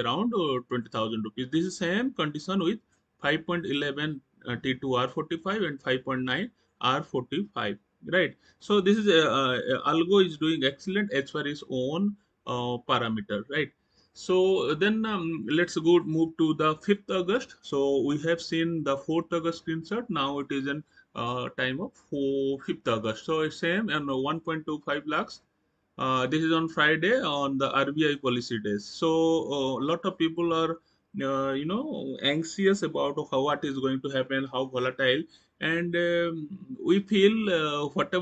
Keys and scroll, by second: 7.9 Right, 9.3 Left, 12.9 Right.